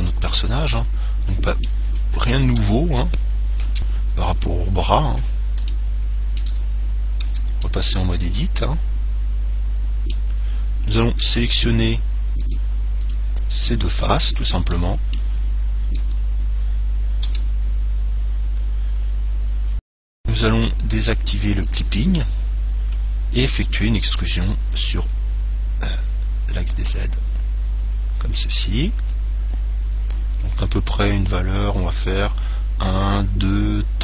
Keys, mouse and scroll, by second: 0.5-3.7 middle drag, 2.7 KP_1, 3.9 KP_3, 5.0-9.9 middle drag, 7.5 Tab, 11.5 ctrl+Tab, 13.3-16.1 right drag, 15.0-16.8 middle drag, 16.2 KP_7, 17.5 KP_3, 19.4-21.6 middle drag, 21.8 click, 24.9 e.